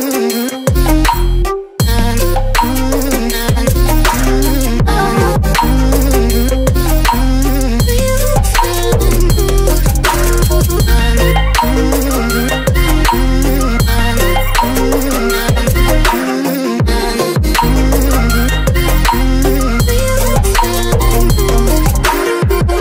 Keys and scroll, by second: 4.6 Return, 6.5 space.